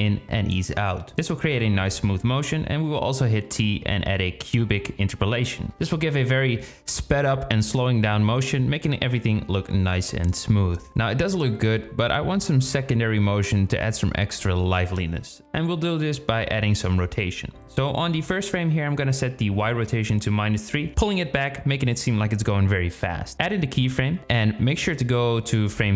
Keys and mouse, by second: 1.7 t, 3.5 click, 4.0 space, 8.3 space, 15.8 click, 17.5-19.1 drag, 23.1 i, 23.8-25.2 drag.